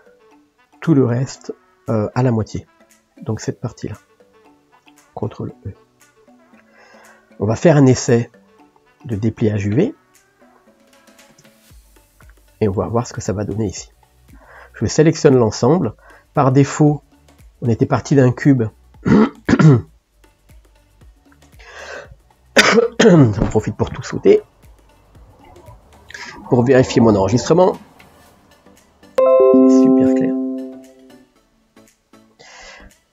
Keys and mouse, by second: 5.5 ctrl+e, 6.8-11.4 middle drag, 11.4 ctrl+space, 13.8 click, 14.3 a, 15.9-32.1 middle drag, 32.3-33.1 middle drag.